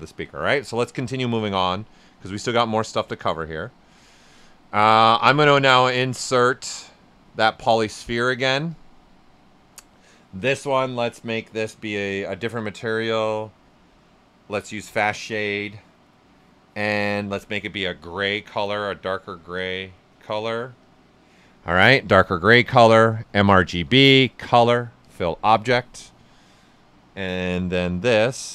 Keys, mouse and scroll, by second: 0.1 right click, 0.5 alt+right click, 1.4-5.5 drag, 15.4 click, 17.7 click, 19.5-23.5 drag, 27.8 w, 28.0 right click.